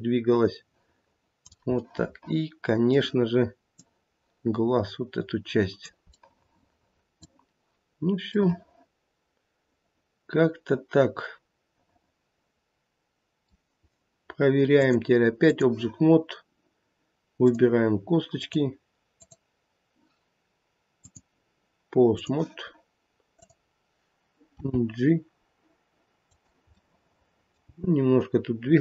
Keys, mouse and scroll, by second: 1.8 middle click, 2.8 middle click, 3.8 click, 6.0 middle click, 7.1 middle click, 7.2 scroll up 1, 7.8-8.2 scroll down 2, 8.3 middle click, 8.5 middle click, 14.7 click, 17.4 click, 18.9 click, 19.1 click, 20.9 click, 24.5 click, 24.5 g, 26.8 middle click, 27.7 g.